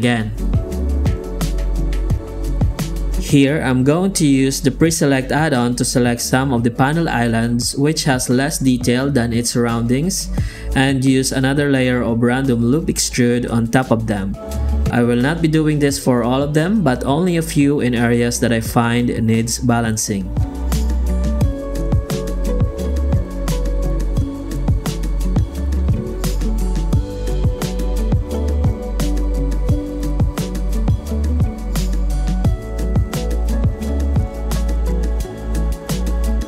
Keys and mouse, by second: 0.1 click, 2.6 click, 3.0 Tab, 3.4 alt+a, 4.2 Tab, 5.5 ctrl+shift+f, 6.4 shift+q, 16.3 alt+a, 16.9 click, 17.5 ctrl+shift+f, 18.2 ctrl+shift+a, 18.6 ctrl+shift+f, 19.2 shift+q, 27.8 ctrl+z, 28.6 Tab, 28.8 Tab, 29.0 shift+q.